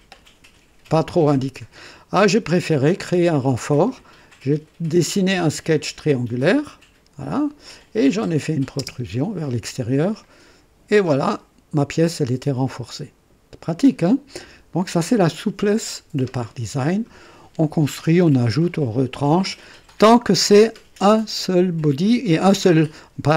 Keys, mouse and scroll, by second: 1.3 click, 2.9 click, 4.9 click, 8.3 click, 8.8 space, 9.6 click, 10.1-14.8 drag.